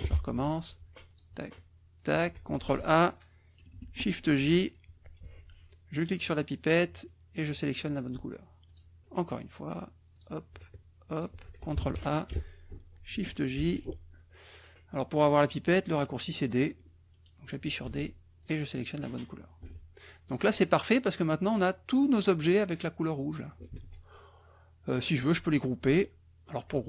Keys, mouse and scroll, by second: 1.1 shift+click, 1.9 shift+click, 2.6 ctrl+a, 4.3 shift+j, 6.6 click, 7.4 click, 8.7 click, 10.1 click, 11.1 shift+click, 11.7 ctrl+shift+a, 13.5 shift+j, 17.8 d, 18.4 click, 19.6 F1, 20.2 click, 20.6-21.7 drag, 22.2-23.5 drag, 23.7 ctrl+z.